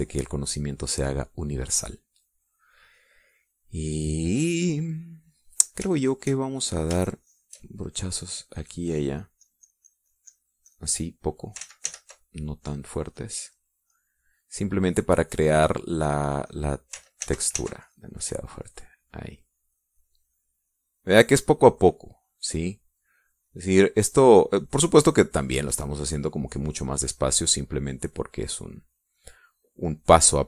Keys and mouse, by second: 0.5 middle click, 0.6 click, 2.6 click, 2.8-4.2 middle drag, 4.2 click, 4.7 middle click, 5.1 middle click, 5.2 click, 6.8 shift+click, 7.9 shift+click, 8.8 shift+click, 9.4-11.4 drag, 11.6 click, 12.5 ctrl+z, 13.5 click, 14.0 click, 14.8 middle click, 17.0 click, 17.4 click, 18.1 ctrl+z, 18.7 ctrl+click, 19.2 ctrl+click, 19.5 ctrl+click, 20.5 click, 22.8 click, 23.4 click, 23.8 click, 24.1 click, 25.0 click, 25.4 click, 26.0 click, 26.3 click, 26.8 click, 27.8 click, 28.2 click, 28.7 click, 29.1 click, 30.0 click.